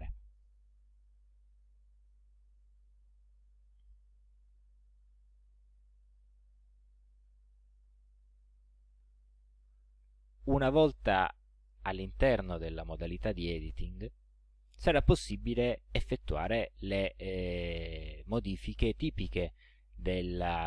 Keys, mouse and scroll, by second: 0.1 click, 8.1-9.8 drag, 12.8 ctrl+scroll up 2, 13.4 ctrl+scroll up 2.